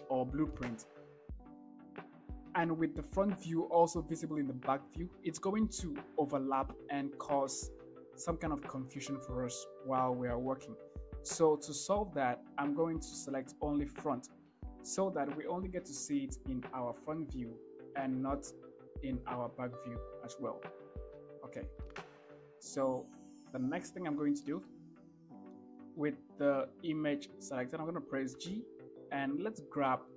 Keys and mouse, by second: 14.2 click, 15.7 KP_1, 18.9 ctrl+KP_1, 22.0 KP_1, 24.7 shift+drag, 28.6 g.